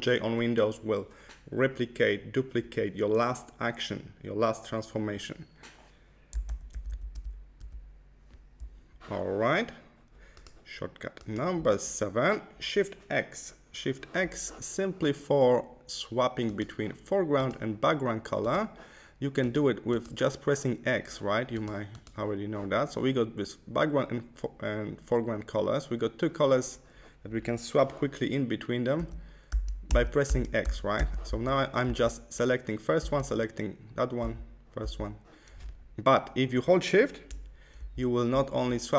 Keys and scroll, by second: 6.5 super+z, 28.9 x, 37.7 shift+x.